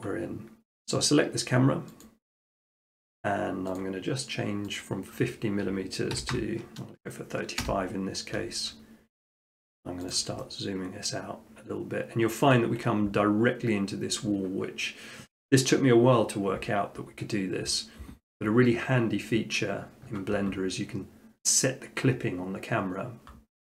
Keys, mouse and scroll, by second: 2.1-3.2 drag, 3.8-6.0 drag, 6.2 typing, 7.6 Return, 9.2 q, 10.1-11.4 drag, 12.6 ctrl+scroll.